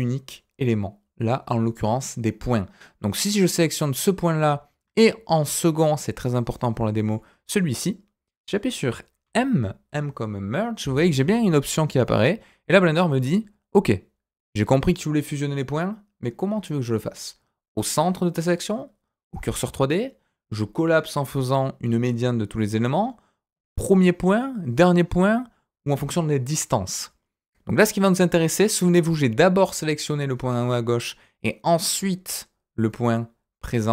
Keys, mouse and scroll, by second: 7.0 shift+click, 9.2 m.